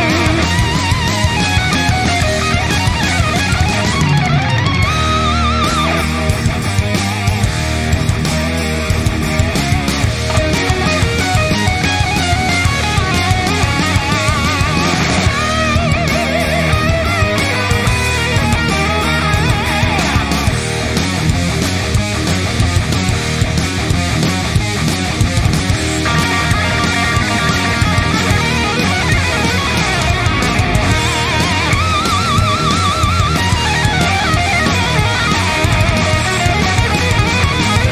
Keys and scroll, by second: 5.7 ctrl+], 6.3 ctrl+], 6.8 ctrl+], 7.4 ctrl+], 8.0 ctrl+], 8.5 ctrl+], 9.4 ctrl+[, 14.4 ctrl+j, 15.7 ctrl+t, 33.3 alt+BackSpace, 37.1 ctrl+z.